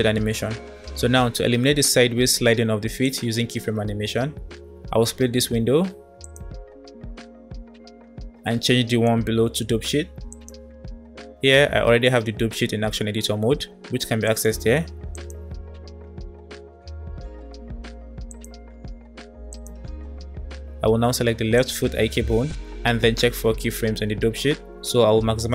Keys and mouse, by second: 3.0 middle click, 5.7 middle click, 6.0-7.8 drag, 9.1-10.6 drag, 14.1-15.3 drag, 18.4 space, 18.4-19.0 drag, 21.5 click.